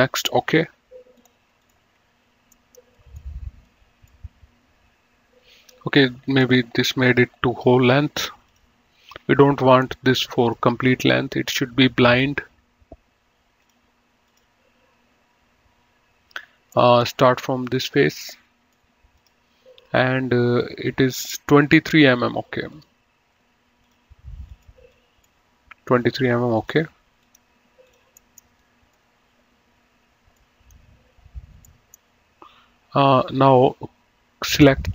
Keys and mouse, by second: 1.5 click, 2.8 middle click, 3.2 right click, 6.6 click, 8.7 click, 10.0 right click, 10.7 click, 13.9 click, 17.1 middle click, 17.9 click, 18.4 middle click, 19.5 click, 23.1 click, 24.2 click, 26.7 click, 28.5 middle click, 28.9 right click, 30.7 middle click, 31.9 middle click, 34.6 click.